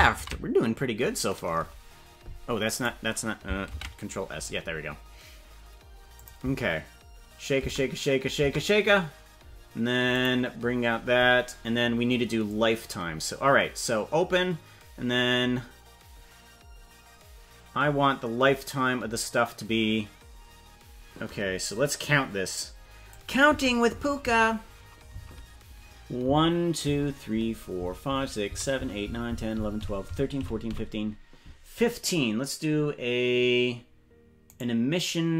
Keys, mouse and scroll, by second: 2.3 ctrl+s, 5.7 ctrl+s, 6.2 click, 6.4 space, 7.8 space, 8.5 space, 10.1 click, 12.5-23.2 drag, 23.6 Right, 24.0 Right, 24.4 Right, 25.1 Right, 26.3 Right, 26.9 Right, 27.4 Right, 27.8 Right, 28.1 Right, 28.5 Right, 28.8 Right, 29.2 Right, 29.4 Right, 29.6 Right, 30.0 Right, 30.2 Right, 30.4 Right, 30.8 Right, 34.6 right click.